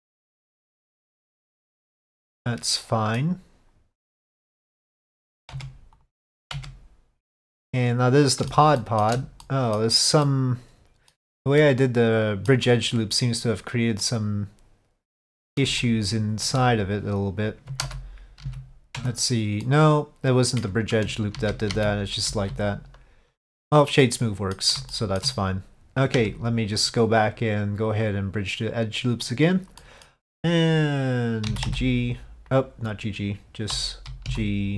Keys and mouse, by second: 0.5 middle click, 1.7 middle click, 2.4 middle click, 5.6 Tab, 7.4-8.6 middle drag, 8.9 middle click, 9.5 middle click, 10.3 middle click, 11.7 middle click, 14.1-15.7 middle drag, 15.9 shift+middle click, 18.0 ctrl+z, 18.9 ctrl+z, 19.1 Tab, 19.7-20.7 middle drag, 21.4 ctrl+shift+z, 24.1 middle click, 25.0 shift+middle drag, 26.2 Tab, 28.2-29.4 drag, 29.9 middle click, 34.4 g.